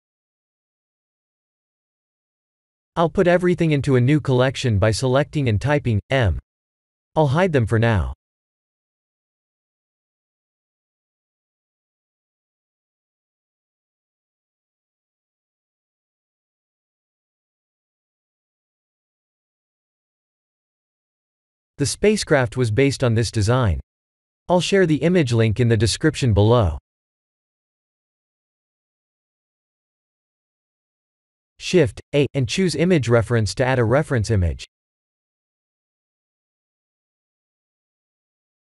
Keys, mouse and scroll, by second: 0.7 click, 1.4 click, 2.1 b, 4.9 m, 9.0 click, 9.6 click, 10.2 shift+click, 11.0 click, 13.1 click, 15.2 click, 15.9 click, 16.6 click, 17.1 KP_1, 18.3 shift+middle click, 25.8 click, 27.9 click, 30.2 shift+a.